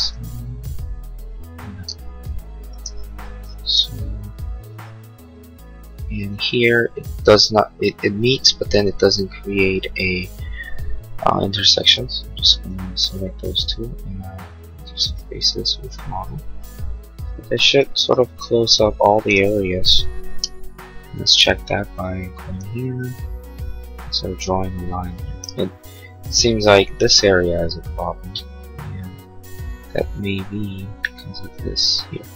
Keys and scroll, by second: 2.8 space, 20.4 l.